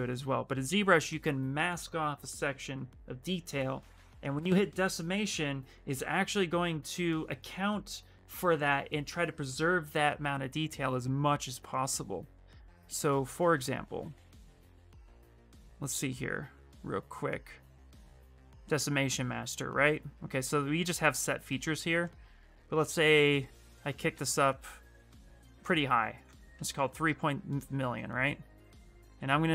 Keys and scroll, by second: 23.2 ctrl+d, 23.9 ctrl+d, 24.5 ctrl+d, 25.3 ctrl+d, 26.3-29.5 typing.